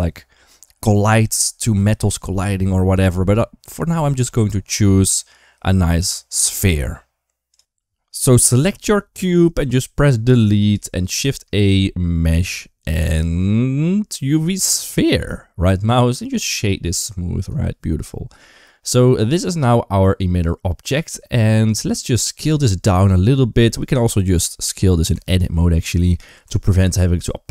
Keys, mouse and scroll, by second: 9.3-9.9 right drag, 10.5 Delete, 11.1 shift+a, 15.6 right click, 17.5 shift+middle drag, 22.3 s, 25.0 Tab, 26.3 Tab.